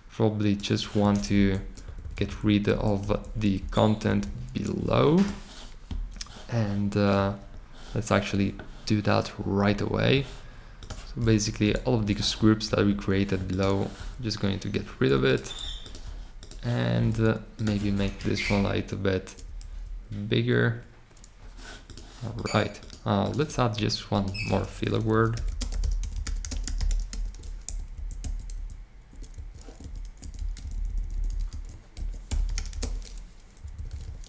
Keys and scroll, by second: 1.3 shift+Left, 1.8 Right, 2.0 Right, 2.4 Right, 2.7 Left, 3.0 Left, 3.5 Left, 4.0 Up, 4.2 Up, 11.6 BackSpace, 18.1 shift+Up, 18.4 shift+Up, 19.4 Down, 19.6 Down, 24.4-27.5 typing, 27.9 alt+shift+Left, 28.2 alt+shift+Left, 28.5 alt+shift+Left, 29.3 Right, 29.8 alt+Left, 30.3 Left, 30.8 Left, 31.2 Left, 31.4 Left, 32.0-33.2 typing, 33.5 Right, 33.8 Right.